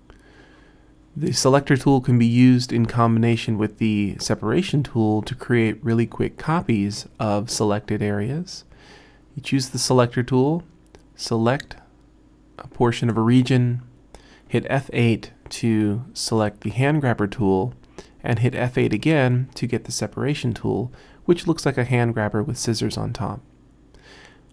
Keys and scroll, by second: 16.4 F8, 19.0 F8.